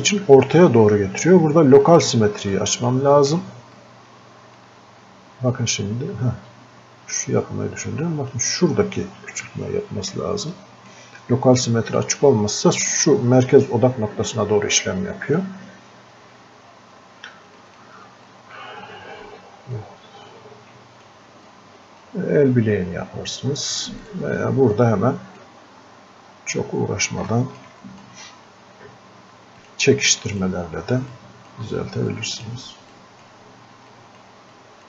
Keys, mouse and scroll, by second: 15.4-25.9 drag, 25.9 scroll up 1, 27.2 scroll down 1, 27.3 alt+click, 30.3 right click, 31.2-34.8 drag.